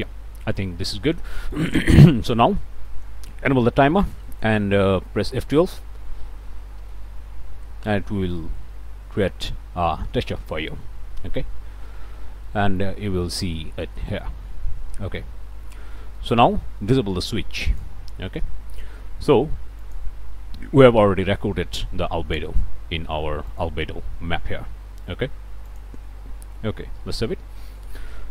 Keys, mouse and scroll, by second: 0.4 click, 0.8 scroll up 1, 1.3 middle click, 1.5 scroll up 1, 4.2 middle click, 6.8 F12, 12.5 middle click, 13.1 scroll up 1, 13.4-14.4 drag, 15.2 scroll up 1, 16.2 click, 17.7 click, 19.8 ctrl+shift+click, 23.5 click, 25.7 click, 27.1 ctrl+s, 27.7 ctrl+click.